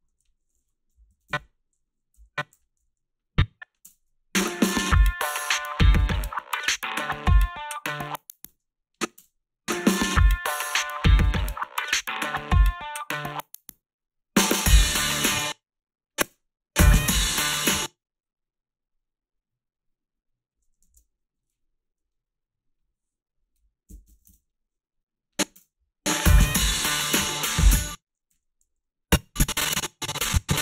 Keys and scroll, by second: 0.1-3.2 typing, 1.1 Down, 1.3 Left, 8.5 space, 9.1 space, 15.3 space, 16.2 space, 17.5 space, 23.6-25.6 typing, 27.7 space, 28.3 space, 28.6 h.